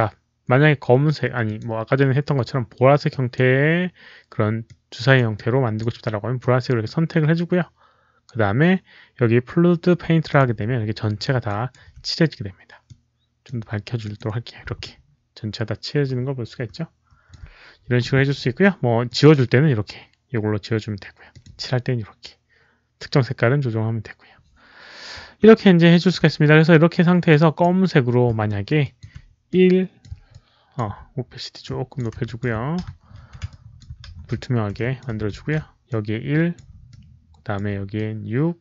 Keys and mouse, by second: 1.3 ctrl+z, 1.3 click, 3.0 click, 3.2 ctrl+z, 4.5 click, 5.2 click, 6.3 click, 10.2 click, 11.4 alt+right click, 12.8-13.4 drag, 12.8 alt+right click, 13.9 click, 14.7-17.2 alt+drag, 16.1 alt+right click, 18.8 alt+right click, 19.0 alt+click, 19.0 alt+right click, 20.5 alt+click, 20.5 alt+right click, 21.0 alt+right click, 21.2 alt+click, 22.2 alt+click, 24.2 alt+click, 25.5 alt+click, 27.2 alt+click, 28.4 alt+middle click, 28.7 alt+click, 29.4 click, 29.8 alt+middle click, 30.2 alt+click, 31.5 alt+click, 32.0 alt+middle click, 32.1 alt+click, 32.3 alt+middle click, 32.8 ctrl+z, 33.4 alt+click, 34.0 ctrl+z, 34.7 alt+click, 35.3 ctrl+z, 35.8 alt+click, 36.8 alt+click, 37.8-38.6 alt+drag.